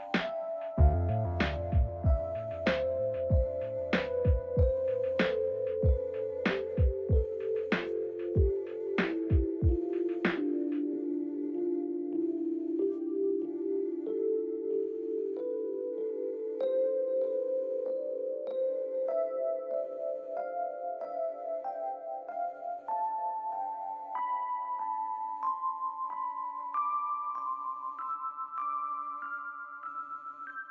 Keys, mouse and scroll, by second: 2.4 double click, 3.2 space, 3.5 double click, 3.6 space, 5.9 ctrl+l, 5.9 ctrl+shift+], 6.7 t, 7.5 ctrl+a, 8.2-9.8 typing, 10.0 ctrl+a, 16.4 scroll down 1, 16.4-19.7 scroll up 1, 30.1 double click.